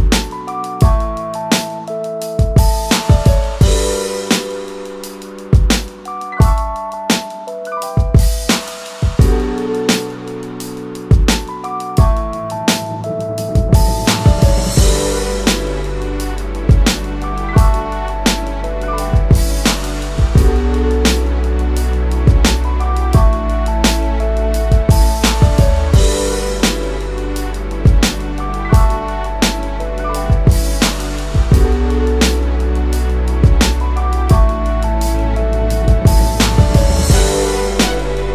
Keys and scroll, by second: 23.3 space, 28.6 space, 32.9 space, 37.9 space.